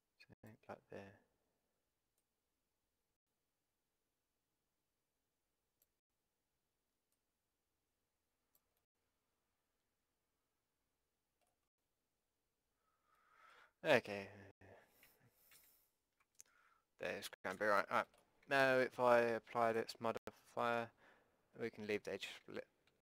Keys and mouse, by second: 0.7-2.2 middle drag, 2.2-4.2 drag, 7.1-8.9 drag, 8.9 middle click, 9.2 click, 9.7 click, 10.5 click, 11.0 middle click, 11.8-15.5 drag, 15.5 ctrl+z, 17.5 a, 18.4 Tab, 19.7-21.7 drag, 22.5 Tab.